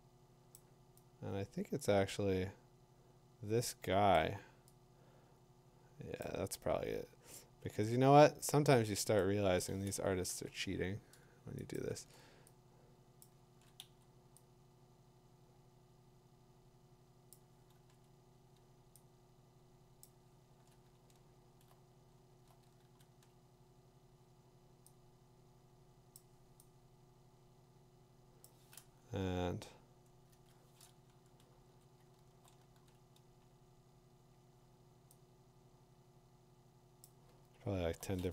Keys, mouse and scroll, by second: 0.5 click, 4.1 click, 6.2 click, 9.2 click, 10.3 Return, 11.7 click, 12.0 b, 13.2 click, 13.5 ctrl+z, 13.8 v, 17.3 click, 17.7 ctrl+t, 20.0 click, 20.5 ctrl+z, 20.8 middle click, 21.0 middle click, 21.3 middle click, 21.6 middle click, 22.3 middle click, 22.3 middle click, 22.8 ctrl+t, 26.1 click, 28.4 click, 30.3 Return, 31.7 v, 32.2 middle click, 32.6 middle click, 32.7 ctrl+t, 35.1 scroll, 35.2 middle click, 35.4 middle click, 37.0 click, 37.4-37.9 scroll.